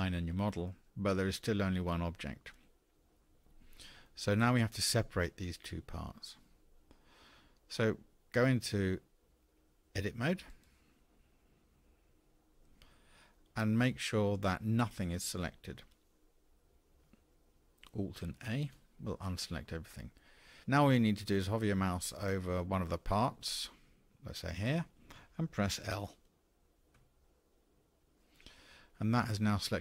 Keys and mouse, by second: 12.0 Tab, 19.1 alt+a, 27.7 l.